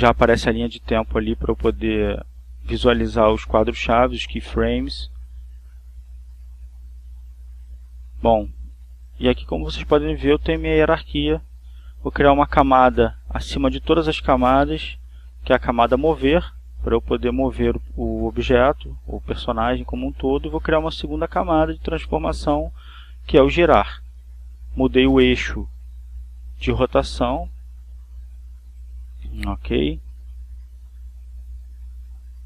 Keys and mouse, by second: 1.7-6.5 drag, 10.5 click, 11.2 click, 11.8 right click, 15.2 click, 20.1 right click, 23.1 click, 25.0-27.1 drag, 28.6 click, 30.5-31.5 drag.